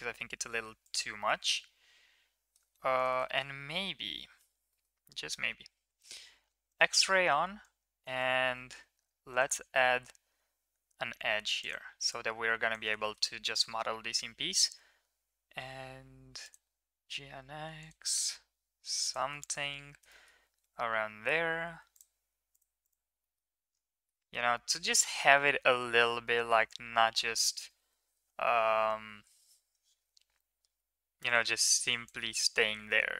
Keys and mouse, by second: 0.8 right click, 1.2-2.5 middle drag, 2.7 Tab, 3.1 middle click, 3.3 middle click, 4.7 middle click, 5.5 KP_1, 6.7 click, 7.8 click, 8.9 ctrl+r, 12.2 click, 13.0 shift+middle click, 16.6 g, 19.3 middle drag, 20.2 middle click, 20.6 Tab, 23.2 middle click, 24.1 shift+middle drag, 24.5-25.4 middle drag, 25.8 Tab, 26.7 KP_1, 29.1 KP_3, 31.3 click, 32.0 click, 32.6 g.